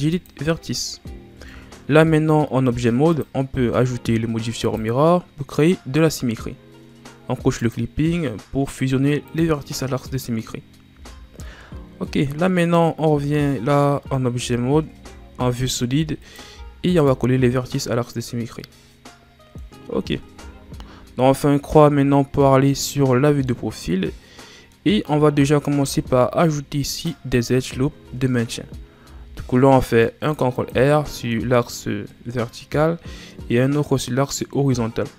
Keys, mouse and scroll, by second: 1.3 Tab, 4.7-6.1 drag, 7.6 click, 9.3-10.4 drag, 10.4-10.9 scroll up 2, 10.9 z, 12.0 scroll up 1, 12.1-13.1 middle drag, 13.1 Tab, 16.2 alt+right click, 17.0-18.3 drag, 18.3-18.6 scroll down 3, 18.6-20.4 middle drag, 20.4 KP_3, 22.1-23.4 scroll down 2, 23.4-25.8 middle drag, 25.8 ctrl+r, 29.0 ctrl+r, 31.0-35.1 middle drag.